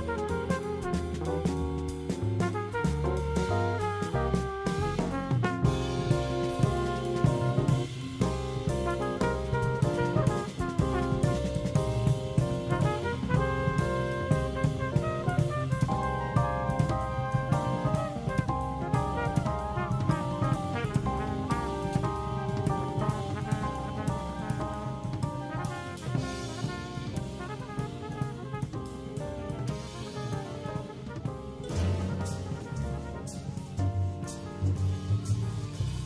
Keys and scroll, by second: 7.3 super+c, 10.5 super+g, 13.7 super+f, 14.5 super+7, 15.7 super+g, 17.6 shift+super+0, 18.3 super+c, 21.8 ,, 30.7 0, 32.6 super+g.